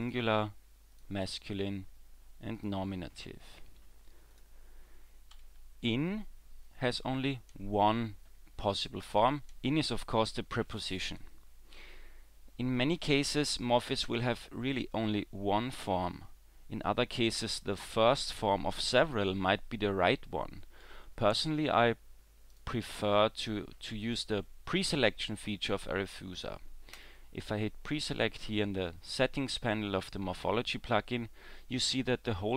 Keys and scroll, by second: 5.4 w.